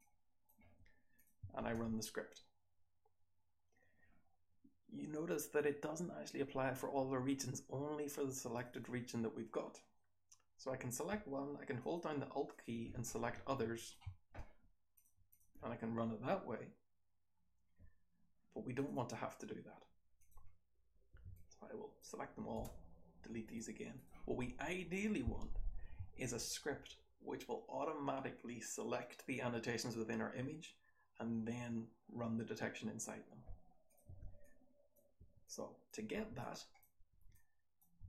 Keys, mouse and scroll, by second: 8.5 click, 8.7 click, 11.7 alt+click, 12.5 alt+click, 18.7 click, 18.9 click, 20.1 click, 21.1 r, 21.3-22.0 drag, 22.5 BackSpace, 23.9 click, 33.8 click, 34.0 r, 34.4-34.9 drag, 35.1 r, 35.4-35.8 drag, 36.1 r, 36.4-36.8 drag, 37.0 r, 37.3-37.7 drag.